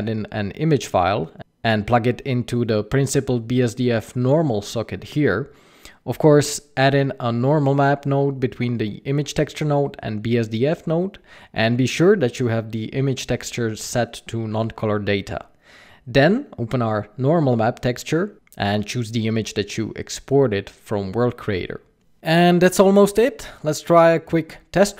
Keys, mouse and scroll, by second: 2.9 click, 4.3 click, 6.4-6.9 scroll up 5, 7.0 shift+a, 12.8 middle click, 13.8 click, 15.6 click, 20.6 click, 22.1 click.